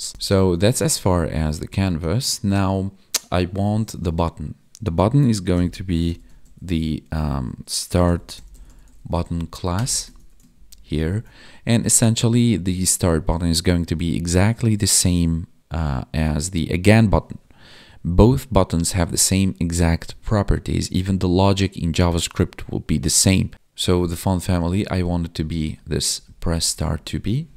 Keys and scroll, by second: 0.8 ctrl+Down, 10.1 ctrl+s, 10.5 ctrl+Down, 23.5 ctrl+s, 24.7 Up, 26.6 Down, 26.8 Up, 27.4 Down.